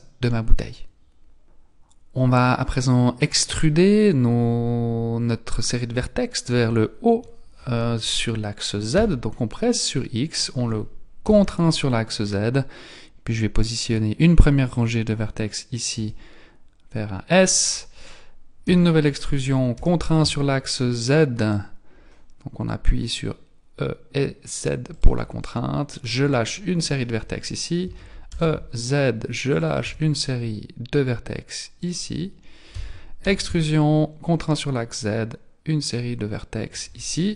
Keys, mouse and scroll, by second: 9.0 e, 17.3 s, 18.6 e, 25.4 shift+middle click, 27.8 e, 29.8 s, 32.7 e.